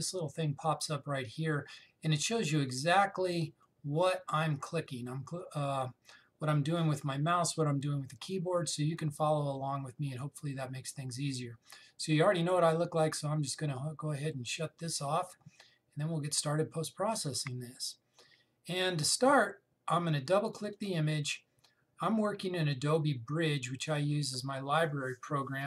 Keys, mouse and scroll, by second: 3.4 click, 4.2 right click, 15.4-18.5 drag, 21.2 click.